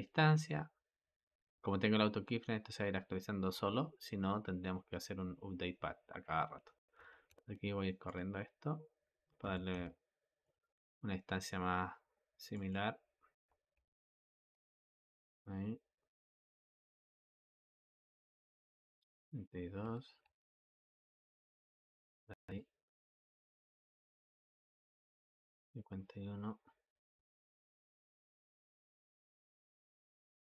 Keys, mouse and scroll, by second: 7.0 g, 9.4 g, 12.4-13.3 drag, 13.3 g, 16.7-19.8 drag, 19.8 g, 22.5-25.4 drag, 27.0 g.